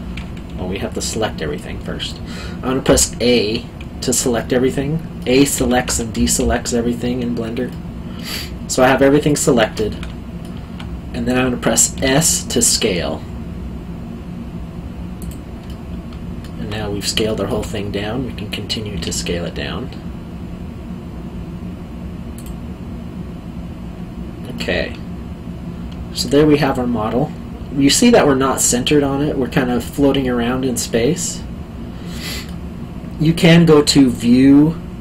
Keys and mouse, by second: 1.5 middle click, 2.9 a, 4.3 middle click, 5.5 a, 7.7 middle click, 10.0 alt+middle click, 11.9 s, 15.2 click, 15.6 middle click, 17.2 alt+middle click, 18.9 s, 22.3 click, 24.5 middle click, 34.0 click.